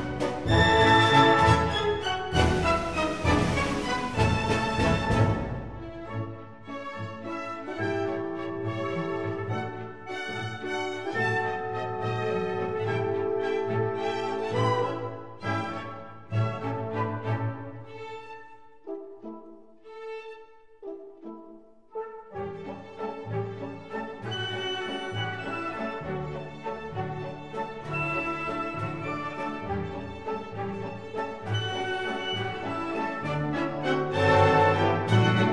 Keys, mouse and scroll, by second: 2.8-4.6 middle drag, 4.6-6.4 drag, 6.4-7.7 middle drag, 8.6 s, 11.4-13.2 drag, 14.6-16.5 drag, 16.8-18.7 drag, 18.9-20.8 drag, 20.8-22.3 middle drag, 23.7 KP_1, 25.5-27.2 drag, 27.1 KP_1, 27.2 click, 31.4-33.2 middle drag, 33.7 Tab.